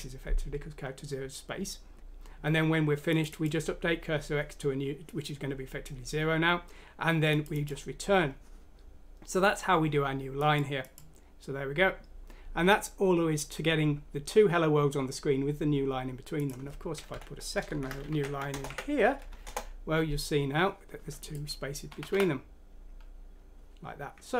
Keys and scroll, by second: 17.7 shift+End, 18.0 ctrl+c, 18.4 End, 18.6 ctrl+v, 19.4 F6, 19.4 Return, 21.8 typing.